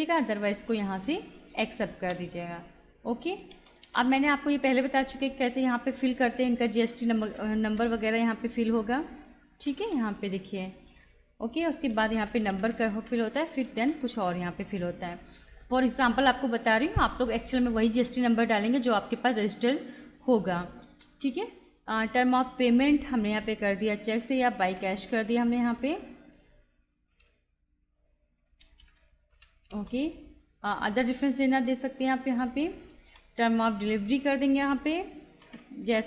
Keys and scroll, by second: 0.5 Return, 3.5 Return, 7.0-8.5 typing, 9.7 u, 10.0 y, 11.7-14.5 typing, 21.0 Return, 24.7 shift+b, 25.1 y, 25.4 space, 28.2-29.8 typing, 33.0 Return, 35.5 shift+b, 35.9 y.